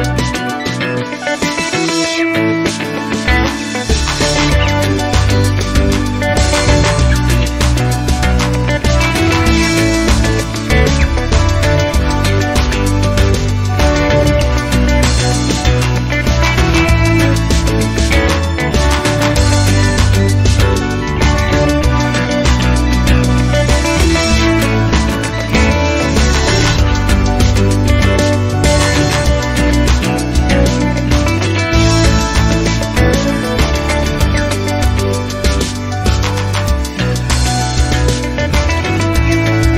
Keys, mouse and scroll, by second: 1.4 click, 6.8 ctrl+click, 7.4 ctrl+click, 7.8 ctrl+click, 9.1 ctrl+click, 9.4 ctrl+click, 10.5 ctrl+click, 11.0 ctrl+click, 12.9 ctrl+click, 14.8 click, 17.9 click, 18.9-19.7 scroll down 2, 20.4 click, 20.8 space, 21.3 click, 21.8 click, 24.5 0, 25.1 scroll down 1, 25.9 scroll up 2, 26.4 scroll down 2, 26.9 scroll up 2, 28.8 click, 31.0 scroll down 2, 31.6 click, 31.9 middle click, 32.5 click, 33.3-34.3 typing, 35.2 click, 35.9-36.8 typing, 37.6 click, 38.4 1, 38.8 0.